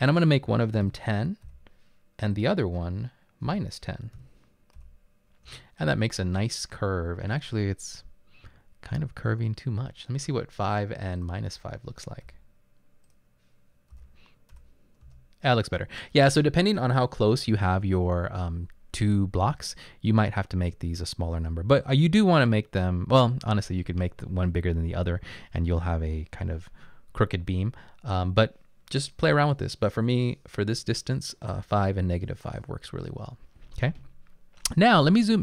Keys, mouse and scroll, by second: 0.9-2.0 typing, 3.5-4.8 typing, 5.5 Return, 6.4 typing, 10.7 typing, 12.3 5, 14.0 -, 14.6 5, 15.1 Return, 19.9 typing.